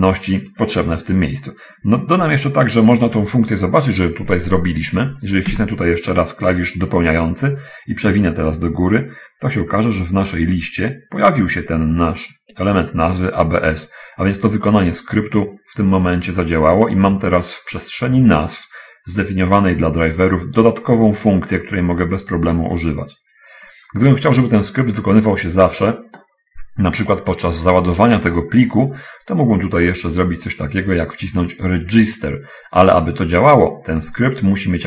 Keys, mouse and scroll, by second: 5.5 Tab, 8.5-11.0 drag, 11.5-13.1 drag, 21.5-22.9 drag, 30.2 middle click, 33.8 middle click.